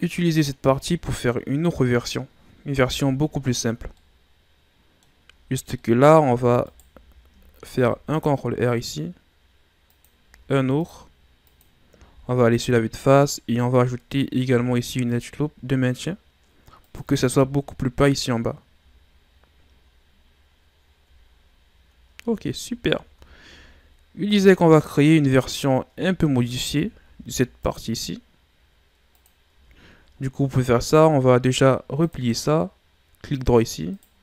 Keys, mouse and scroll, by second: 0.4 scroll up 2, 1.1-2.8 middle drag, 2.8 KP_1, 3.9-5.1 middle drag, 5.1 scroll up 2, 5.3 Tab, 5.8 middle click, 6.6 alt+right click, 7.7 ctrl+r, 10.4 ctrl+r, 11.9 s, 12.1 KP_1, 14.4 ctrl+r, 17.3 Tab, 19.1-19.6 shift+scroll up 8, 20.6 scroll down 2, 21.3-22.1 scroll down 8, 22.1 a, 22.7 a, 22.9 scroll down 2, 23.2 shift+scroll up 5, 24.3 right click, 25.3 scroll up 3, 25.9 Tab, 27.0 ctrl+r, 29.5 Tab, 29.8-30.2 scroll down 5, 30.6 a, 32.0 click, 33.3 click, 33.9 right click.